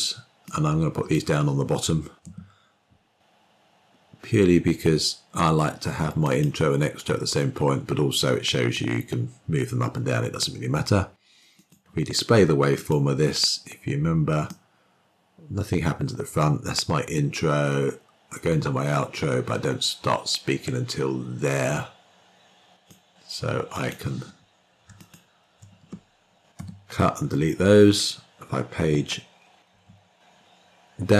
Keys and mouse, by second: 1.5-2.2 drag, 12.7 click, 13.8 click, 15.6-24.1 drag, 24.8 click, 27.7 k, 28.3 Delete, 30.8 Page_Down.